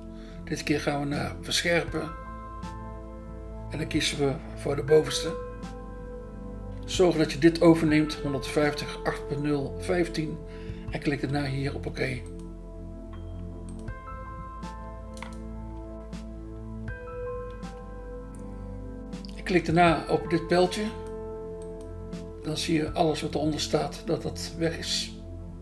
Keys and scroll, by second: 0.2 BackSpace, 10.0 BackSpace, 11.9 BackSpace, 20.0 BackSpace, 22.3 BackSpace.